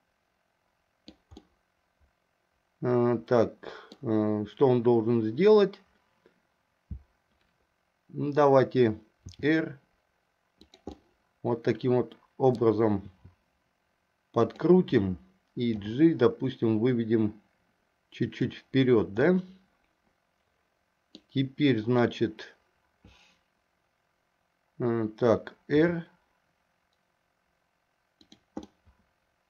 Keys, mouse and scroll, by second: 1.6-4.1 middle drag, 9.4 r, 11.1-12.8 middle drag, 13.2 r, 15.9 g, 19.3-21.3 middle drag, 25.9 r, 28.8-29.4 middle drag.